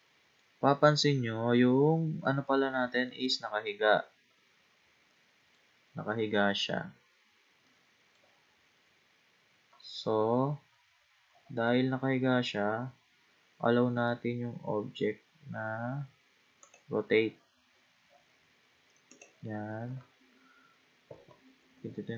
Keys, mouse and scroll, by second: 1.6-2.5 scroll up 1, 2.5-4.4 middle drag, 4.4-5.1 scroll down 2, 5.1 middle click, 6.0-7.7 scroll down 4, 7.7-8.9 middle drag, 8.9-9.5 scroll up 1, 9.5-10.0 scroll up 1, 10.0-10.8 scroll down 1, 10.8 scroll down 1, 11.0-13.0 scroll up 14, 13.0-13.5 scroll up 1, 16.6 click, 17.7-18.1 scroll up 3, 18.1-19.1 scroll down 5, 19.1 click, 21.7 KP_1.